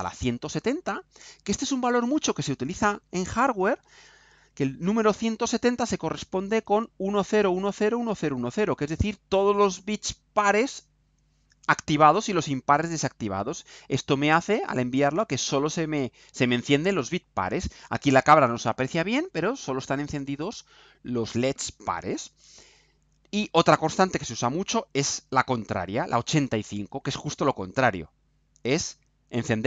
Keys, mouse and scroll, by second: 2.0 click, 3.7 ctrl+u, 26.4 click, 28.9 click.